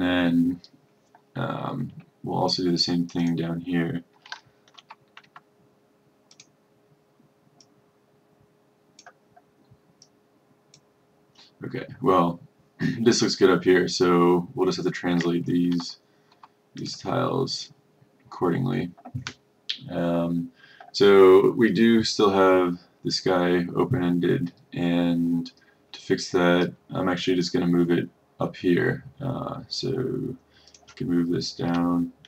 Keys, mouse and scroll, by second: 4.8 F1, 5.3 F2, 6.5-9.9 drag, 15.8 F1, 16.9 click.